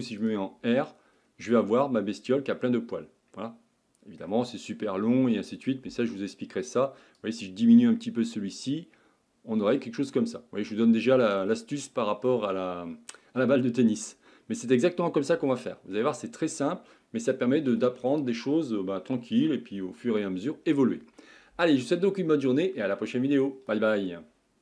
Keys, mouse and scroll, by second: 0.4-1.3 scroll up 1, 1.3 click, 1.4-2.0 scroll down 1, 2.0-2.5 scroll down 3, 2.5-7.3 middle drag, 7.3-10.1 drag, 10.1-10.6 scroll up 3, 10.6-11.5 middle drag, 11.5-11.9 scroll down 1, 11.9-15.1 shift+middle drag, 15.1-15.4 scroll down 2, 15.4-20.3 shift+middle drag, 20.3-21.7 scroll down 1.